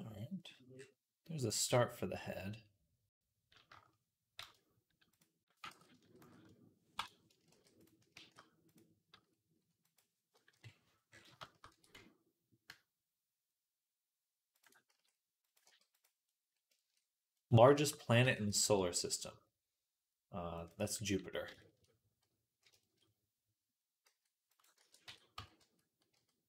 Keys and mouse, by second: 1.3 click, 4.2 shift+s, 5.5 ctrl+z, 6.1 shift+s, 7.4 shift+d, 8.0 shift+s, 9.0 s, 10.3 click, 10.3 KP_3, 11.3-14.5 shift+drag, 11.5 r, 14.5-25.2 middle drag, 14.7 s, 15.5 g, 18.0 r, 23.9 s, 24.6 ctrl+a, 25.2 Tab, 25.2-26.4 drag, 25.4 a, 26.0 f.